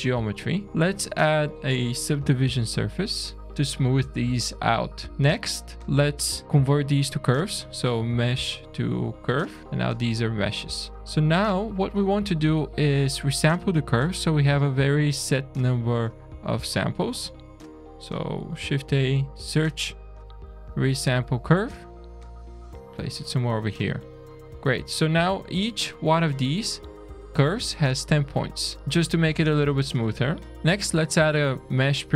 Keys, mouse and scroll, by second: 0.4 click, 0.6 shift+a, 3.4 Down, 3.6 middle click, 4.3 middle click, 4.8 click, 5.8 ctrl+a, 10.4 click, 11.0 middle click, 11.0-11.3 scroll down 3, 11.3 middle click, 12.4 middle click, 18.6 shift+a, 22.8-23.1 scroll up 2, 23.1 middle click, 24.0 click, 24.7-26.1 scroll down 2, 28.4 middle click, 28.8 click, 28.8 shift+middle click, 29.6 middle click, 30.5 click, 30.5 middle click, 30.5 scroll down 2, 31.0 shift+a.